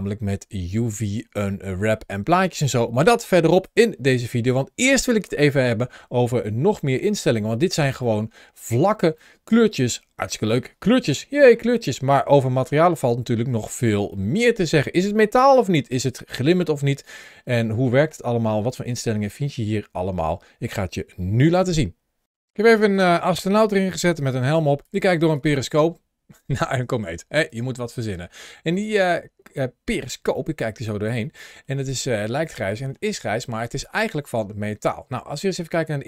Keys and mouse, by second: 7.9-8.2 middle drag, 9.0-10.0 middle drag, 11.0 shift+middle drag, 11.7 middle click, 12.1-12.5 shift+middle drag, 13.9 shift+middle click, 14.5 middle click, 17.4 shift+middle drag, 22.3 middle click, 23.6 g, 24.0 click, 24.7 click, 24.9 g, 25.2 click, 26.6 click, 26.8 g, 27.2 click, 27.9 middle click, 28.6 click, 30.3 shift+middle click, 31.3 shift+middle drag, 31.9 middle click, 32.3 shift+middle click.